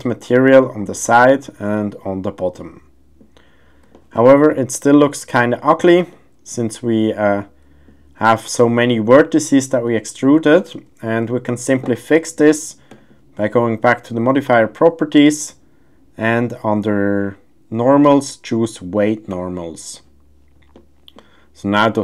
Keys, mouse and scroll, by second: 0.9-1.3 middle drag, 2.5-3.2 middle drag, 3.9 shift+middle click, 3.9 shift+scroll, 4.5-5.0 middle drag, 6.1-7.8 middle drag, 9.8-10.2 middle drag, 10.5 shift+middle drag, 11.3 shift+middle drag, 11.3 shift+scroll, 14.6-19.6 drag, 20.7-21.1 middle drag.